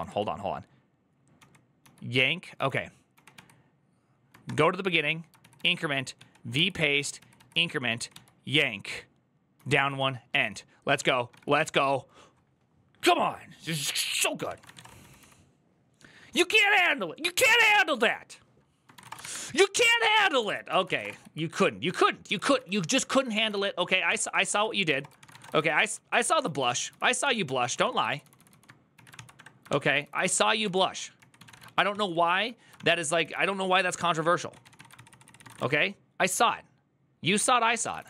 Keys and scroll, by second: 0.0-4.2 typing, 5.2 ctrl+a, 5.3 ctrl+a, 5.7-6.4 typing, 6.9 ctrl+a, 7.7 typing, 9.1-12.1 typing, 14.0-15.3 typing, 18.7-35.8 typing, 20.3 alt+{, 21.6 ctrl+d, 23.3 ctrl+e, 23.8 ctrl+c, 32.6 ctrl+v, 37.3-38.0 typing.